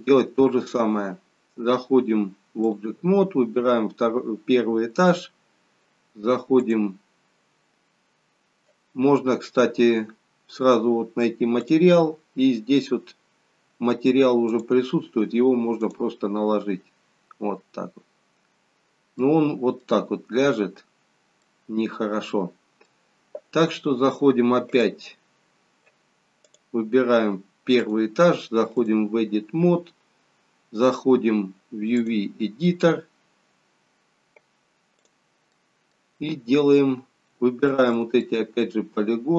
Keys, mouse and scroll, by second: 2.7 click, 6.6 click, 11.8 click, 20.4 middle click, 20.4-21.0 scroll down 3, 21.0-22.2 scroll up 1, 22.2 middle click, 22.2-22.5 scroll up 1, 24.7 click.